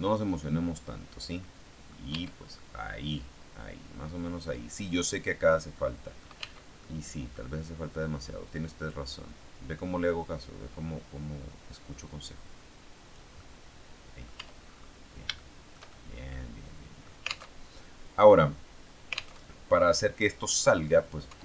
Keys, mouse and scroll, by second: 2.0 Tab, 2.4-5.6 middle drag, 6.4 Tab, 6.8 middle click, 8.4 click, 9.2-10.0 scroll down 1, 10.0 scroll down 1, 13.3-14.3 middle drag, 14.3 Tab, 14.9-15.2 scroll up 3, 15.2-16.8 shift+middle drag, 16.8 click, 17.5 alt+Tab, 19.3 alt+Tab, 19.7-21.0 alt+drag, 21.2 Tab.